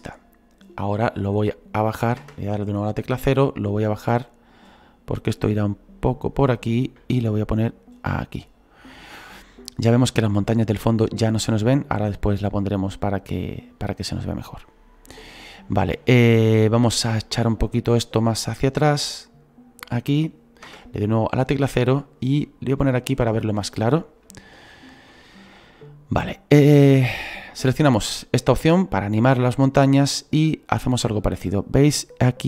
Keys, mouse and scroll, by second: 2.2 KP_0, 3.2-16.6 drag, 10.4-12.0 middle drag, 12.0-12.4 scroll up 2, 12.4-13.7 middle drag, 13.7-14.1 scroll down 2, 14.1-17.2 middle drag, 17.2-18.5 scroll down 6, 18.5-20.6 drag, 20.6 KP_0, 23.2 click, 23.8-24.3 scroll up 4, 24.3 shift+middle click, 25.2-25.8 scroll up 4, 29.2 click, 30.1-32.4 drag.